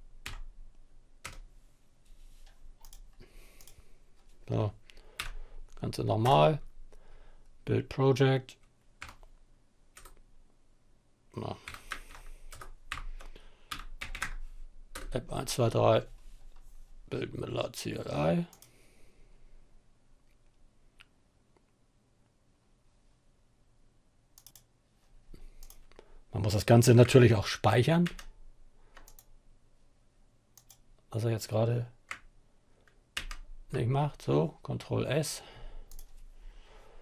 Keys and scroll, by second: 0.0-0.6 typing, 4.6 Up, 5.7 Return, 8.4 ., 11.1-14.0 typing, 14.3 Return, 27.2 ctrl+s, 32.4 ctrl+s, 36.6 Up, 36.9 Up.